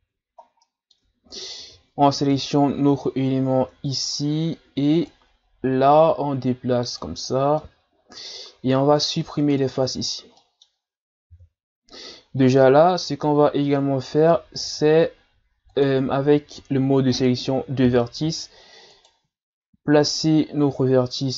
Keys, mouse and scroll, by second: 0.0 Tab, 0.4 scroll down 2, 0.6 middle click, 1.0 Tab, 1.3 right click, 1.6 Tab, 2.3 KP_1, 5.1 click, 7.3-7.6 scroll down 2, 7.6 middle click, 8.4-9.0 scroll up 1, 9.0 ctrl+Tab, 10.4 middle click, 11.3 KP_3, 12.4-12.9 scroll up 1, 12.9-14.4 scroll down 1, 14.6 ctrl+Tab, 18.9 alt+right click, 20.1 click.